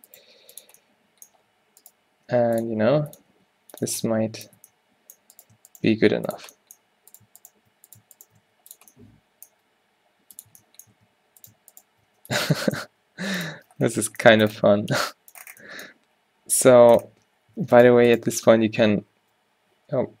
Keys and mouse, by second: 0.3 g, 2.5 g, 2.9 s, 3.4 g, 4.0 Tab, 5.3 Tab, 6.4 g, 8.5-9.9 drag, 8.5 s, 10.6 Tab, 11.0 Tab, 12.1 s, 12.9 g, 16.7 Tab, 16.9 Tab, 17.2 Tab, 17.6 Tab.